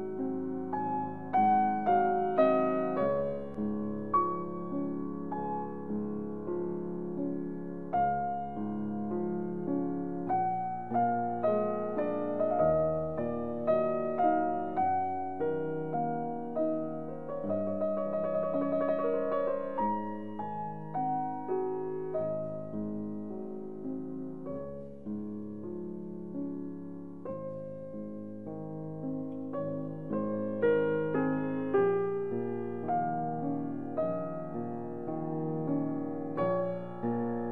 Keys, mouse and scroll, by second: 2.3 middle click, 3.8 e, 10.1 click, 11.5-13.9 middle drag, 13.9-19.1 drag, 19.1-21.1 middle drag, 21.1-22.0 scroll down 1, 24.1-32.5 drag, 33.0 click, 33.0-34.7 drag, 36.1-37.5 middle drag.